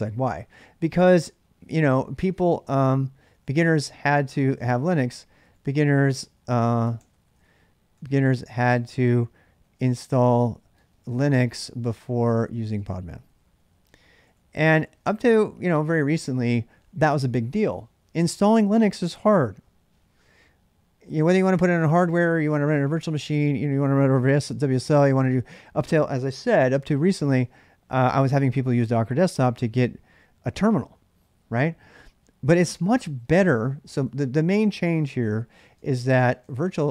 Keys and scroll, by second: 2.7-3.1 typing, 5.5-16.0 typing.